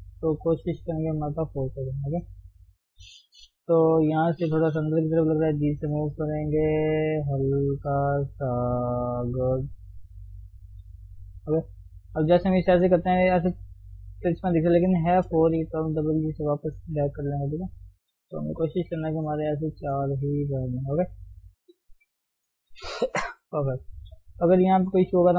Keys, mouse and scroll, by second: 0.2 ctrl+z, 0.6 ctrl+z, 1.1 scroll down 1, 1.3 shift+middle click, 1.5 scroll up 2, 1.8 click, 2.3-2.6 scroll down 1, 2.6 shift+middle click, 2.9-3.5 scroll up 1, 3.5 1, 3.6 scroll up 1, 4.1 click, 5.1 g, 6.6 click, 6.9 click, 7.1 g, 7.8-8.4 scroll down 1, 8.4-9.1 scroll up 3, 9.1 click, 9.5 click, 9.8 g, 10.8 g, 12.1 g, 15.6 g, 16.8 ctrl+z, 17.5-20.9 shift+middle drag, 20.9 scroll down 1, 21.2 shift+middle click, 21.6-23.6 scroll up 2, 23.6 KP_3, 23.9-24.3 scroll down 3, 24.3 shift+middle click, 24.6-25.1 scroll up 1, 25.1 click.